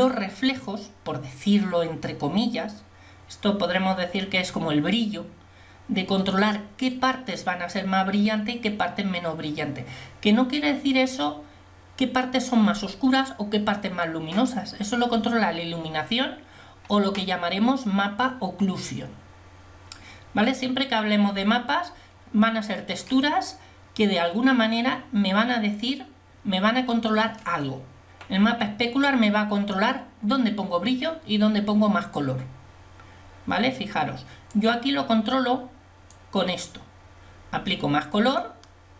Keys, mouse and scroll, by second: 34.8 click.